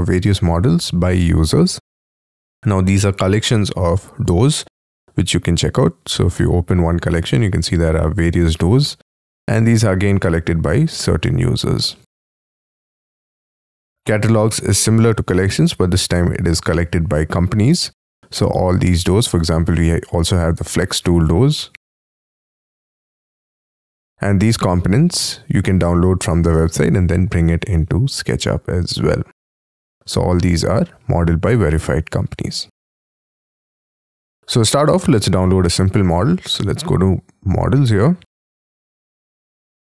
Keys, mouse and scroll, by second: 7.4-8.8 scroll down 9, 8.8 scroll up 5, 22.6-23.4 scroll down 1, 23.4-24.3 scroll down 11, 24.8 scroll down 3, 25.8-26.6 scroll down 10, 27.3-28.5 scroll down 5, 29.4-32.1 scroll down 2, 32.1-33.1 scroll down 3, 33.1-36.1 scroll up 14, 38.0-38.7 scroll down 1, 38.7-39.9 scroll down 2.